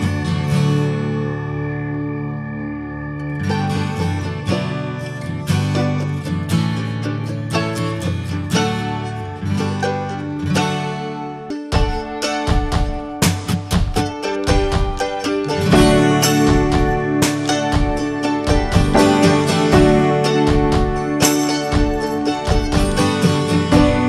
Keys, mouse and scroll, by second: 3.4 click, 4.6 click, 6.0 l, 6.5-6.8 scroll up 1, 7.8 g, 12.8-13.8 drag, 13.8 scroll up 1, 14.1-14.8 middle drag, 14.8 click, 15.0 ctrl+a, 16.5 click, 17.1 click, 17.3-17.7 middle drag, 17.7 click, 18.1 ctrl+a, 18.3-19.5 middle drag, 19.5 click, 20.1 Tab, 20.8 p, 21.2 click, 21.7 click, 22.1 Tab, 22.4 click, 22.7 middle click, 23.4 click, 24.0 ctrl+a.